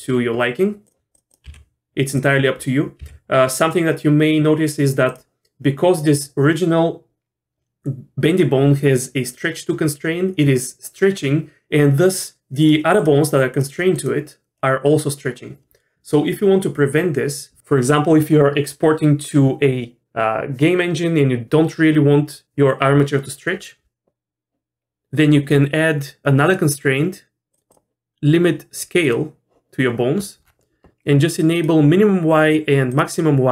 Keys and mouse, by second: 2.1 g, 3.0 g, 13.5 click, 26.5 click, 27.8-29.1 drag, 31.5 click, 32.9 click.